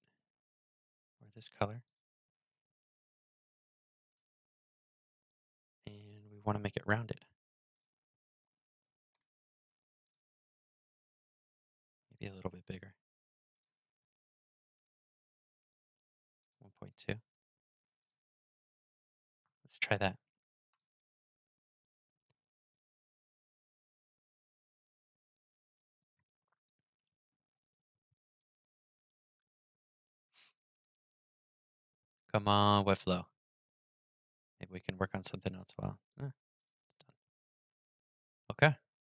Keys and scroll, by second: 36.7 super+r.